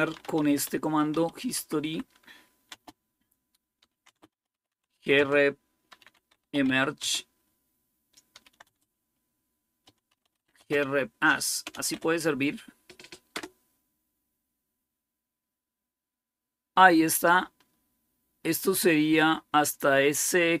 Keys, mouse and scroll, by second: 0.0-13.2 typing, 16.3-17.4 scroll up 2, 17.4-19.0 scroll up 1, 19.0-20.6 scroll up 1.